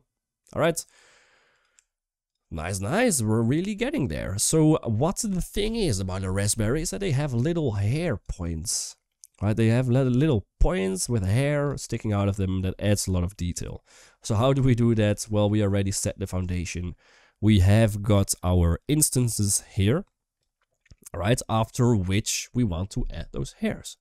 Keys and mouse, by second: 1.5 Tab, 3.5 middle click, 7.2 shift+middle drag, 8.0-8.5 drag, 8.0-11.4 typing, 8.9-9.5 middle drag, 10.0 click, 10.8 click, 12.0 middle drag, 14.1 Up, 14.1-15.9 typing, 14.4 shift+middle click, 15.0 right click, 16.3 shift+middle drag, 18.5 click, 18.7 click, 18.9 typing, 19.2 middle click, 19.8 click, 21.4 middle click.